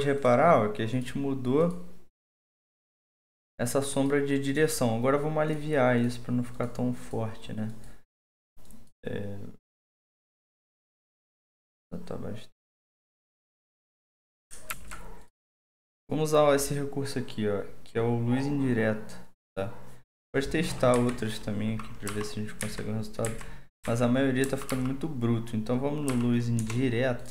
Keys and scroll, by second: 14.7 alt+2, 20.9 Down, 22.1 Up, 22.6 Down, 23.2 Down, 23.8 Down, 24.4 Up, 24.7 Up, 26.1 Up, 26.6 Return.